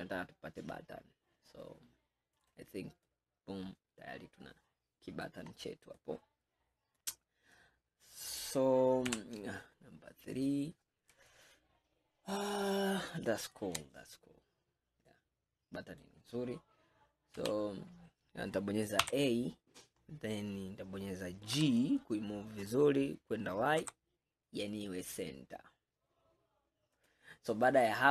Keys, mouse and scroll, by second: 3.1-5.7 middle drag, 5.7-6.0 scroll down 1, 6.0-9.2 middle drag, 9.2 KP_3, 10.1-10.5 scroll up 4, 11.3-13.9 shift+middle drag, 13.9-14.6 scroll down 5, 15.1-17.4 middle drag, 17.4 KP_3, 18.3 scroll up 4, 19.1 a, 19.6 scroll up 2, 20.1-20.4 scroll down 2, 21.6 g, 27.6-28.1 scroll down 1.